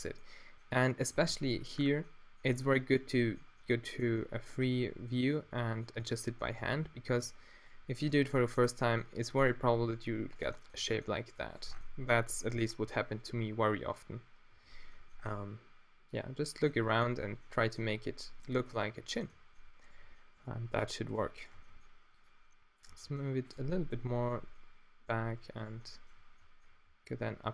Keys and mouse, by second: 1.3 Tab, 4.6 Tab, 5.4 g, 6.6 Tab, 7.2 Tab, 10.7 g, 11.6 Tab, 12.0-14.3 middle drag, 14.5 z, 18.9 Tab, 21.6 g, 22.9 g, 24.3 Tab, 25.2 Tab, 26.9 e.